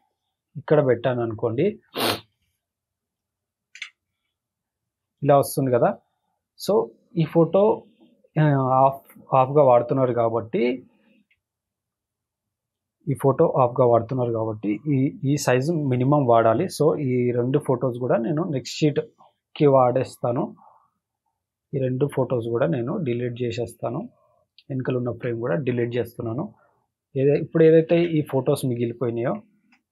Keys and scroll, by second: 3.0 ctrl+shift+], 19.6 Delete, 21.5 Delete, 23.3 Delete, 25.2 Delete, 27.9 ctrl+t.